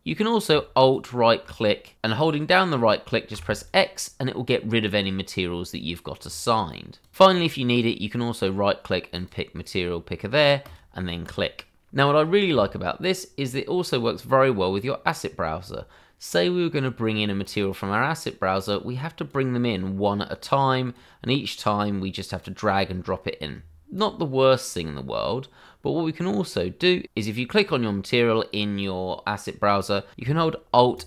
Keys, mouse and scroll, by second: 0.9 alt+right click, 3.3 x, 6.2 click, 6.8 double click, 6.8 click, 7.3 right click, 9.1 click, 13.4 click, 14.5-14.8 scroll down 1, 17.4 click, 26.9 scroll down 1, 28.3 click, 30.9 alt+right click.